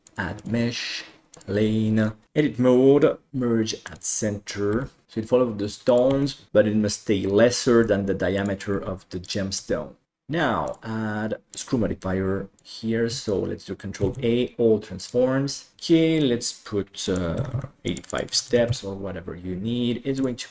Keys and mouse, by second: 0.1-1.4 drag, 2.2 Tab, 3.3 m, 4.8 g, 5.0 e, 6.1 e, 6.5 e, 7.6 e, 8.7 e, 9.6 e, 10.6 click, 11.6-12.6 drag, 14.0 ctrl+a, 15.7 alt+z, 17.1 click, 18.1 click.